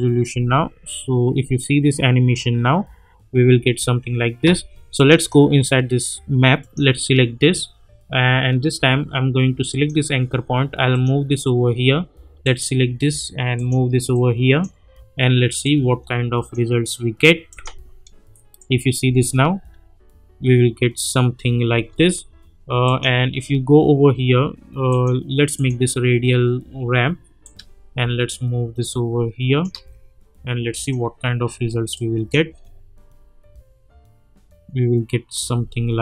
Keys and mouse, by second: 0.3 space, 3.5 space, 4.9 click, 11.8 click, 15.1 -, 15.6-16.5 drag, 19.0 space, 21.7 space, 22.8-32.5 drag, 27.7-29.9 shift+drag, 32.2-32.5 drag, 32.5 space, 35.5 space.